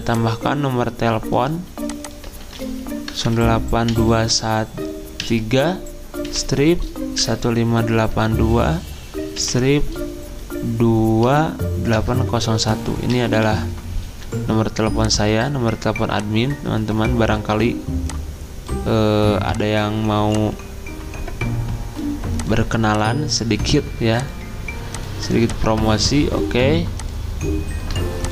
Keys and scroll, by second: 2.4 ctrl+a, 2.9-3.9 typing, 5.2 3, 6.3-8.0 typing, 9.4 -, 11.3-14.0 typing.